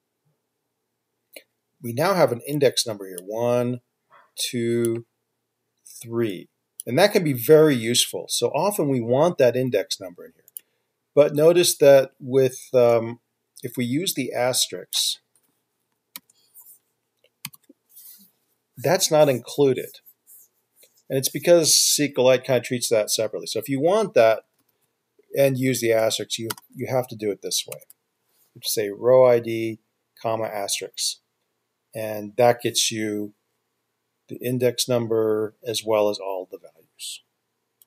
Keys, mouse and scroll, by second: 16.4 typing, 17.6 ctrl+F5, 24.5-26.9 typing, 27.9 ctrl+F5.